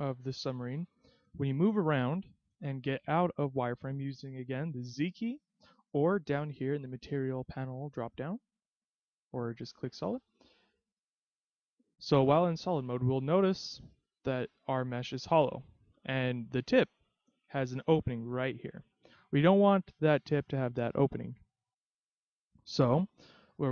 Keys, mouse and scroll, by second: 0.8 middle click, 5.1 z, 6.7 click, 7.7 click, 10.6 z, 11.3 z, 12.9 middle click, 16.8-17.5 scroll up 1, 17.5-19.2 scroll up 1, 19.2-20.2 scroll down 1, 20.5-20.9 scroll down 3, 21.8 middle click.